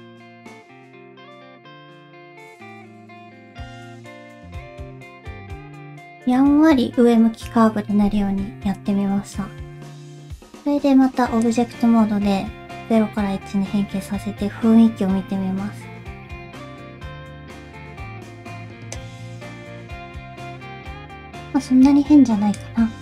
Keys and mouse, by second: 1.2 middle click, 1.5 shift+middle click, 2.0 click, 2.4 g, 3.4 middle click, 9.2 Tab, 11.4-18.9 drag, 19.0-21.3 middle drag, 22.5 click.